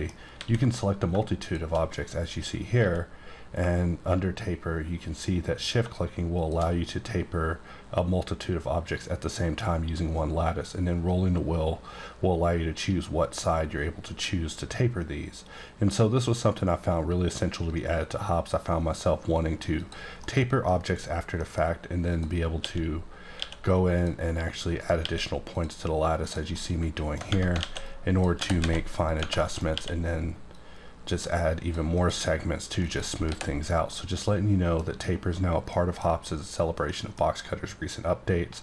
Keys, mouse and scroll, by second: 0.3 a, 1.4 shift+click, 2.7 q, 5.8 shift+Num_Lock, 6.3 shift+click, 10.2-11.6 scroll down 1, 11.8-13.0 scroll down 1, 13.0-14.5 scroll down 1, 14.5-16.4 scroll down 1, 19.8 click, 20.2 scroll down 1, 20.2 middle click, 21.1 scroll down 1, 21.4 middle click, 22.0 click, 22.5 q, 23.4 q, 23.9 click, 24.8 right click, 24.9 q, 25.5 click, 26.2 click, 26.5 middle click, 27.3 Tab, 27.6 alt+a, 27.8 click, 28.3 g, 28.6 z, 29.0 click, 29.2 Tab, 29.3 middle click, 29.7 q, 30.5 click, 31.9 click, 32.8 click, 33.2 h, 33.6 scroll up 1, 33.8 middle click, 35.6 middle click, 35.9 scroll down 1, 36.8 middle click.